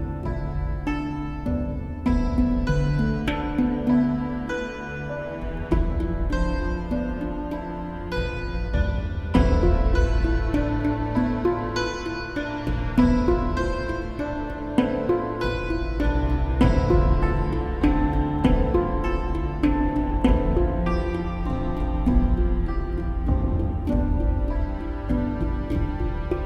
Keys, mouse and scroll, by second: 0.9 right click, 1.4 right click, 2.3 right click, 2.9 right click, 3.1 right click, 3.7 right click, 4.2 right click, 4.8 right click, 4.9 right click, 5.2 right click, 5.4 right click, 6.4 right click, 6.6 right click, 6.9 right click, 7.1 right click, 7.9 right click, 8.9 right click, 9.7 right click, 10.5 right click, 13.9 right click, 14.9 right click, 15.1 right click, 15.3 right click, 18.6 right click, 18.8 right click, 19.0 right click, 19.1 right click, 19.7 right click, 20.2 right click, 20.6 right click, 21.1 right click, 22.0 right click, 23.0 right click, 25.0 right click, 25.2 right click.